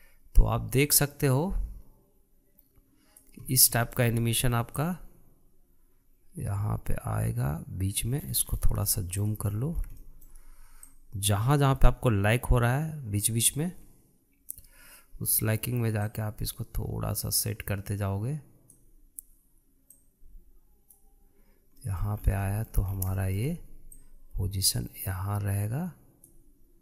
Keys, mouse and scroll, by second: 1.8-4.5 drag, 4.5-4.8 scroll down 3, 4.8-5.9 shift+middle drag, 5.9 click, 9.3-9.9 scroll up 10, 9.9 shift+middle click, 10.5-11.0 scroll up 4, 11.0-12.0 shift+middle drag, 12.0-15.0 drag, 17.1 click, 21.0-22.8 drag, 22.8 middle click, 23.2 scroll up 3, 23.4-23.9 shift+middle drag, 23.9 scroll up 1, 24.2-24.9 shift+middle drag, 24.9 click.